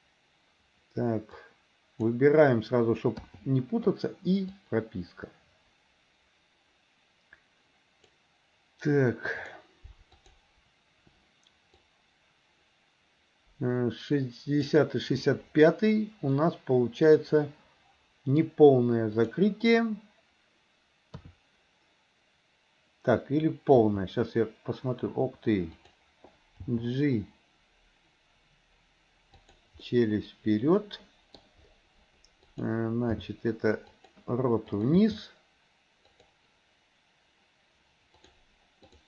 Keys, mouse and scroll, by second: 1.5 click, 4.6-8.3 drag, 9.5 click, 10.1 click, 12.0-14.8 drag, 16.5-18.5 middle drag, 19.2 click, 21.2 KP_3, 23.9 r, 26.6 g, 29.8-31.4 scroll up 1, 31.4 middle click, 33.1 g, 34.7 click, 35.1 g, 38.1 click, 38.9 click.